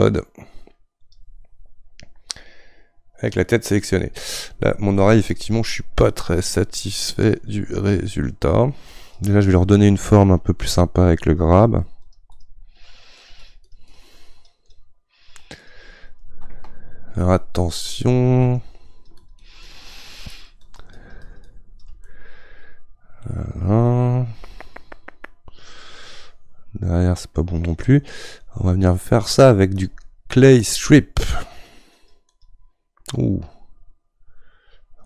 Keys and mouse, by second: 1.2-22.1 drag, 22.1-25.1 middle drag, 29.8-35.0 drag.